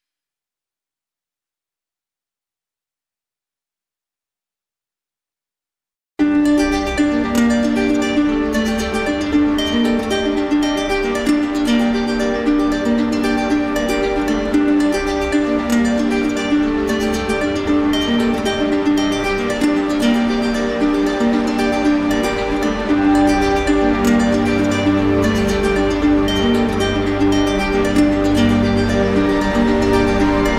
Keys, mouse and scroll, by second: 0.7 click, 2.1 alt+click, 3.3 alt+click, 4.6 d, 4.8 d, 6.8 click, 7.1 click, 7.4 d, 9.9 alt+click, 10.8 click, 11.2 click, 12.6-14.2 typing, 14.9 alt+click, 16.0 click, 16.9 shift+click, 19.0 click, 19.7 ctrl+z, 21.0 alt+click, 22.3 click, 23.9 d, 24.2 d, 26.2 alt+click, 28.9-30.0 typing.